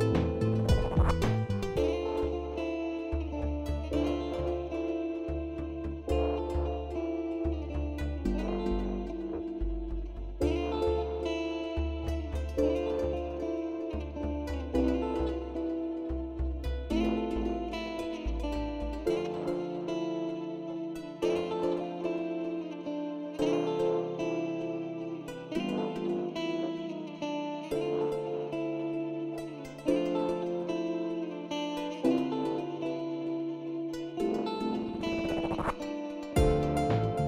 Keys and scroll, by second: 1.4 F3, 2.3 F3, 5.4 F3, 6.8 F3, 9.8 z, 16.7 s, 20.8 s, 22.6 shift+s, 22.9 shift+s, 25.3 shift+s, 27.6 s, 31.3 s, 31.6 s, 35.6-37.2 typing.